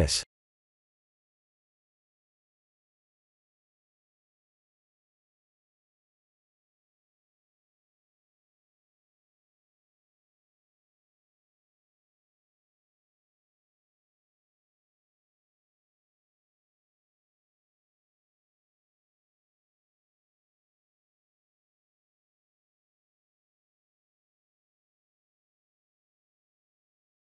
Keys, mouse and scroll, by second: 5.9 ctrl+3, 6.7 s, 9.0 g, 10.6 shift+middle click, 11.5 e, 12.1 Tab, 12.9 a, 13.2 e, 15.3 r, 16.6 e, 17.4 g, 19.2 e, 20.3 g, 22.2 ctrl+r, 25.4 ctrl+r.